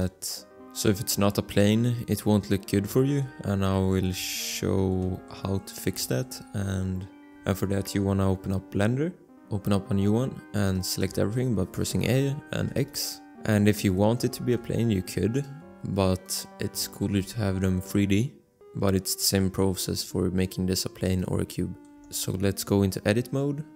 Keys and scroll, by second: 11.2 a, 12.5 x, 14.5 alt+Tab, 17.2 shift+a, 22.0 Tab.